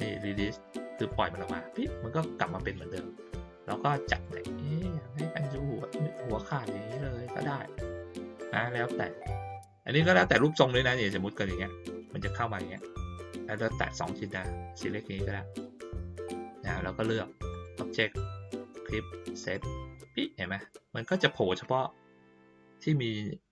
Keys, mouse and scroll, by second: 0.9 click, 3.5 click, 4.2-10.2 drag, 10.6-12.7 drag, 14.7-15.5 drag, 17.5 click, 19.4 click.